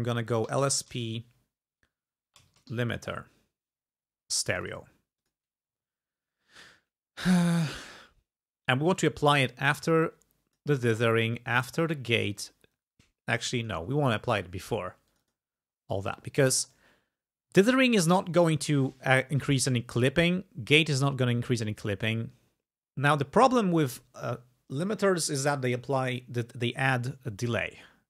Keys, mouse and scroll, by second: 0.2-1.2 typing, 2.3-3.4 typing, 4.5 click, 5.2 click, 9.0-10.8 drag, 12.8-13.9 drag, 15.1 click, 16.2 click, 21.6 click.